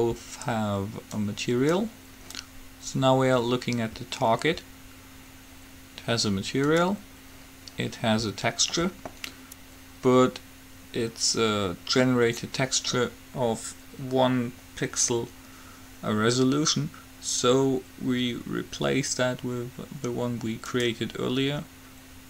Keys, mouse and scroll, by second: 1.3-3.2 drag, 6.9-8.7 drag, 20.9-22.2 drag.